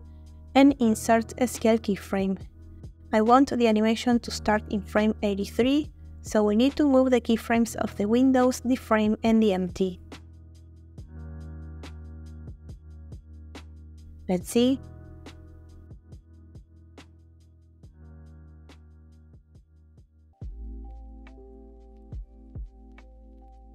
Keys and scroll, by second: 0.2 0, 10.8 a, 12.1 g, 15.4 space, 20.2 space.